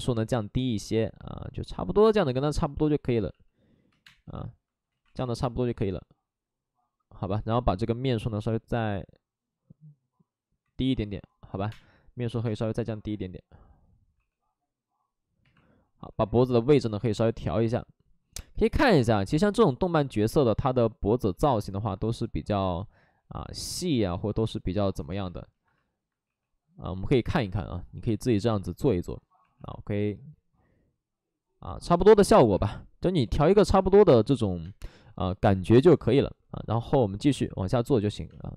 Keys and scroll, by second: 3.8 2, 4.0 space, 5.1 ctrl+z, 5.1 2, 11.2-12.4 typing, 14.1 w, 15.4 2, 15.9 w, 21.3 ctrl+z, 25.0 2, 26.2 w, 29.4 2, 32.5-35.4 typing.